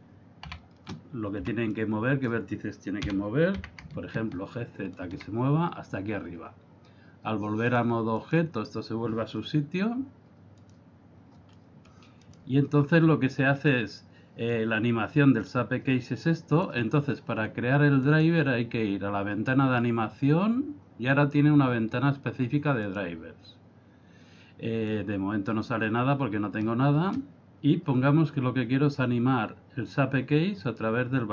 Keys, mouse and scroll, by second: 0.5 a, 1.4 b, 3.0 g, 7.6 click, 10.6 click, 11.5 middle click, 12.3 right click, 13.6-14.5 scroll down 4, 14.5 click, 18.1 click, 24.9 click.